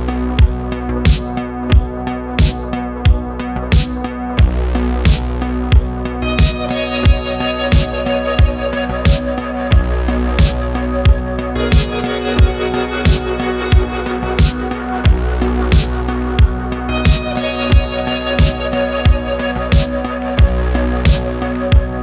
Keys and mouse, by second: 0.3-3.1 drag, 3.7 middle click, 4.6-5.9 drag, 7.7 middle click, 10.5-10.9 middle drag, 13.2-15.1 drag, 15.7 middle drag, 19.0-20.1 middle drag, 20.3-20.6 middle drag, 21.7 click.